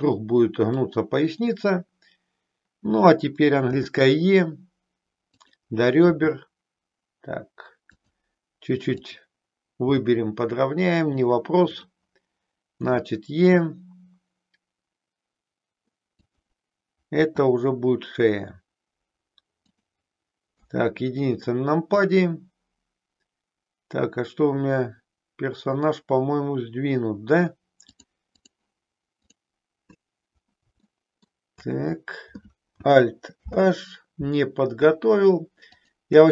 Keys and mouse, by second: 0.9 click, 3.7 e, 5.4 click, 6.1 e, 9.9 g, 11.0 click, 17.1 e, 19.7 click, 20.5 KP_1, 27.7 click, 29.3 click, 31.0 shift+middle click, 33.4 alt+h, 35.7 shift+click.